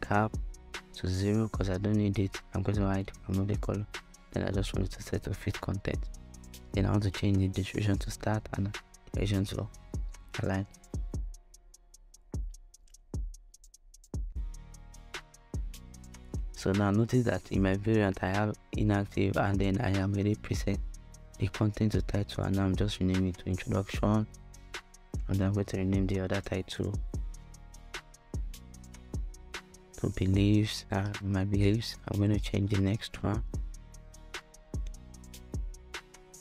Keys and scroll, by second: 17.4-20.4 typing, 20.8 Return, 26.0-29.3 typing, 33.2-35.8 typing, 36.2 Return.